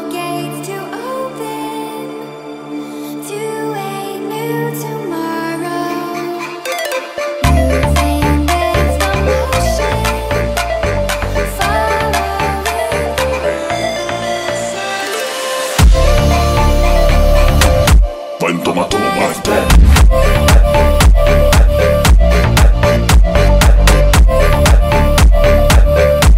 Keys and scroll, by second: 4.4 Delete.